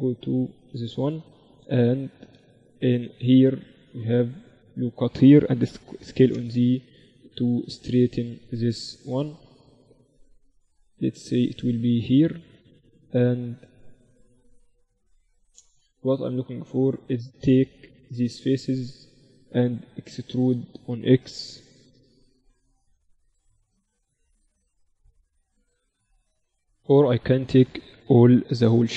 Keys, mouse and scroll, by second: 1.1 KP_3, 2.5 Tab, 3.2 ctrl+r, 5.5 s, 7.5-9.5 drag, 15.5-19.9 middle drag, 18.1-20.5 drag, 18.5-19.9 right drag, 20.5-26.5 middle drag, 26.5 a, 26.7 a, 27.5-28.9 middle drag.